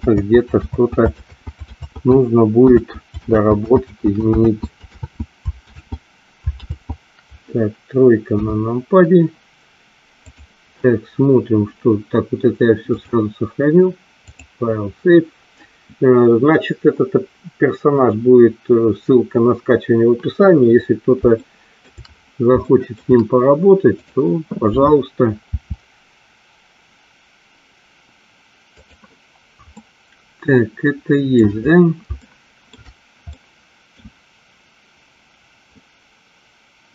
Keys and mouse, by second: 0.3 ctrl+z, 0.8 ctrl+z, 1.9 ctrl+z, 3.4 ctrl+z, 3.9 ctrl+z, 4.6 ctrl+z, 8.3 KP_3, 10.3 click, 13.1-14.6 drag, 21.6 shift+middle click, 22.7 shift+middle click, 24.1 click, 25.7 r, 29.0 click, 30.0-31.4 middle drag, 32.3 shift+middle click, 33.4 middle click.